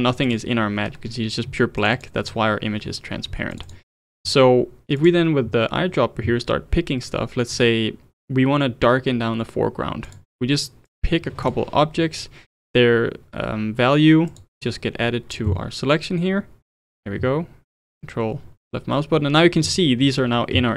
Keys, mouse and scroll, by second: 0.3 ctrl+shift+click, 1.8 ctrl+shift+click, 2.0 ctrl+shift+click, 3.5 ctrl+shift+click, 3.7 ctrl+shift+click, 5.0-8.2 drag, 10.9-13.9 drag, 14.3-17.3 drag, 17.7 ctrl+shift+click.